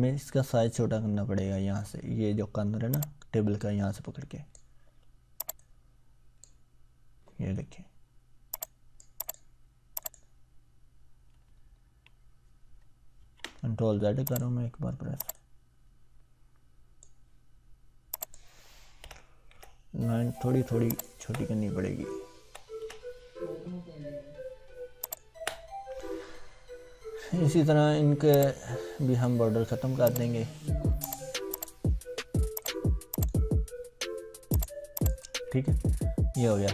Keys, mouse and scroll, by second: 2.9-4.8 drag, 11.6 ctrl+scroll up 1, 13.2 ctrl+z, 13.8 scroll up 1, 14.3-17.2 drag, 19.0 Delete, 20.9 click, 21.2 Delete, 25.0 click, 25.3 Delete, 28.4-29.3 drag, 36.2-36.7 ctrl+scroll down 1.